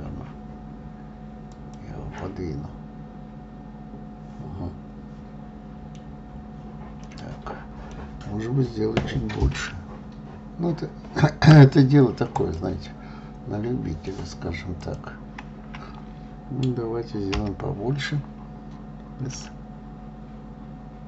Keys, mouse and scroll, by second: 2.6-5.6 middle drag, 7.4-9.9 middle drag, 9.9 s, 12.7 click, 13.2-15.2 middle drag, 15.2 click, 17.7 l.